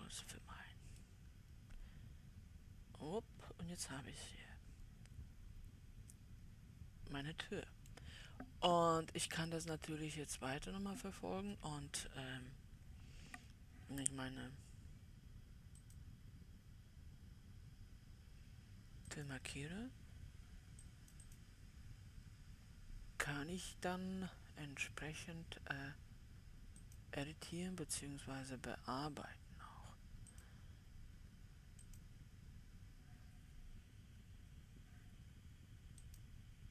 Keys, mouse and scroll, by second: 0.0-1.5 drag, 1.5-16.3 middle drag, 16.3-18.3 drag, 19.6-24.8 drag, 27.2-30.3 drag, 30.9-35.0 drag, 36.5-36.7 drag.